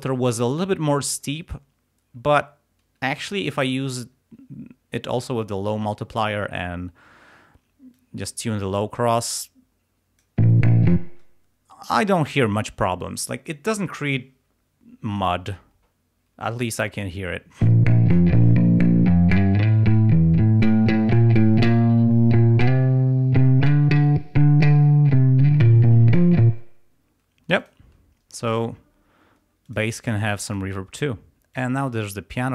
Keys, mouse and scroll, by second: 8.0-10.4 drag, 10.5 space, 17.7 space, 26.6 space, 27.6 click, 28.5 click, 28.9 scroll down 2, 29.7 click, 30.5 click, 31.6 click.